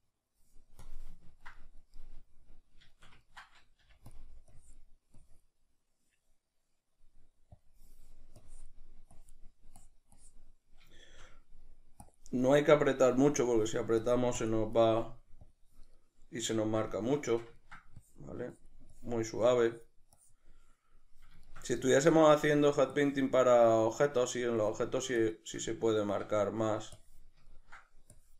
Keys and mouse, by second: 0.9 click, 1.3-4.2 ctrl+middle drag, 3.8 f, 4.2 click, 6.9-8.4 middle drag, 8.4-10.7 drag, 10.7-12.1 middle drag, 12.1-16.0 drag, 16.0-18.0 middle drag, 18.0-21.4 drag, 21.4-22.9 shift+middle drag, 22.9-24.2 drag, 24.2 middle click, 24.6-25.6 drag, 25.6-27.0 middle drag, 27.0 click, 27.6 ctrl+middle click, 28.1 click.